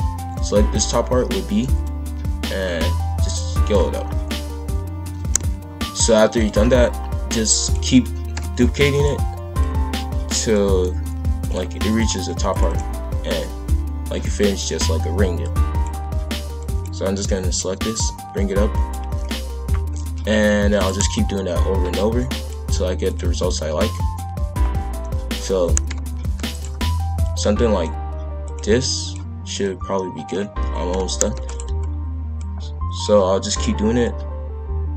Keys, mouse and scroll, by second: 0.1 b, 1.8 click, 4.0-5.0 scroll down 1, 5.0 ctrl+l, 5.3 z, 7.0-7.6 scroll down 1, 7.6 click, 8.3 ctrl+l, 8.8 shift+d, 9.6 click, 10.9 z, 11.9 click, 12.1 b, 12.7 click, 13.6 click, 14.6 click, 15.0 b, 16.3 b, 17.5 click, 20.1 ctrl+l, 20.7 shift+d, 21.3 click, 23.0 click, 23.2 b, 24.1 click, 25.8 ctrl+l, 26.4 shift+d, 27.2 click, 28.4 click, 28.6 b, 29.6 click, 30.9 ctrl+l, 31.3 shift+d, 32.3 click, 33.5 click, 33.8 b.